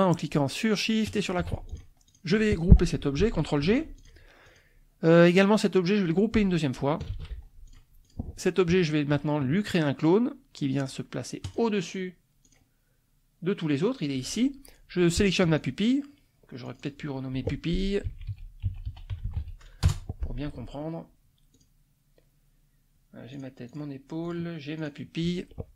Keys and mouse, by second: 1.1 shift+click, 1.7 shift+click, 2.0 shift+click, 3.6 ctrl+g, 4.0 ctrl+click, 4.4 ctrl+click, 7.1 ctrl+g, 7.7 ctrl+click, 8.1 ctrl+click, 11.5 click, 12.4 click, 15.5 shift+click, 16.7 click, 17.8-19.8 typing, 19.9 Return, 21.5 click, 23.3 click, 23.7 click, 24.2 click, 24.8 click.